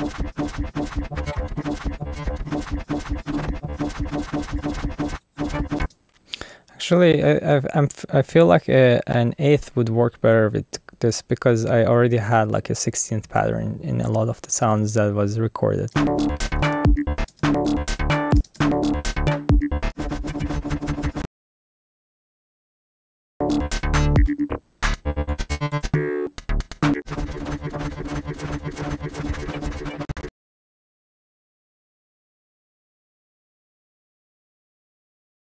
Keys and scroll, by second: 0.0-4.9 typing, 6.8 space, 15.9 space, 17.2 space, 20.0 space, 21.1-22.7 typing, 27.3-35.5 typing.